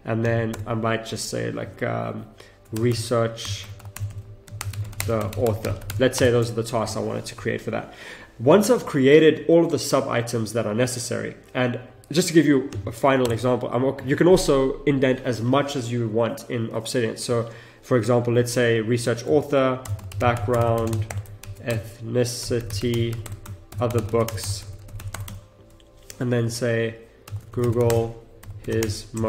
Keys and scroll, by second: 1.5 Return, 4.5 space, 6.6 Return, 13.2 Return, 13.3 Tab, 19.2 Tab, 19.8 shift+b, 21.1 Return, 21.3 shift+e, 23.2 Return, 23.7 shift+o, 24.2 space, 25.2 Tab, 27.2 shift+g, 27.9 space.